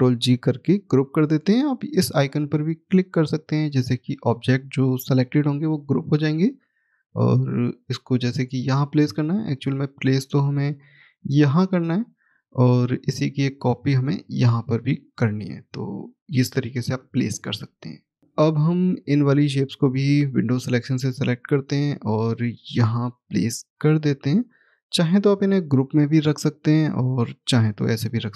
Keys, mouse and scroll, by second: 4.3-5.8 scroll down 1, 5.8 middle click, 6.9 click, 8.5 scroll down 1, 9.1 middle click, 9.6-10.6 scroll up 1, 10.7 click, 14.9 right click, 15.7 click, 19.3 click, 27.9 middle click.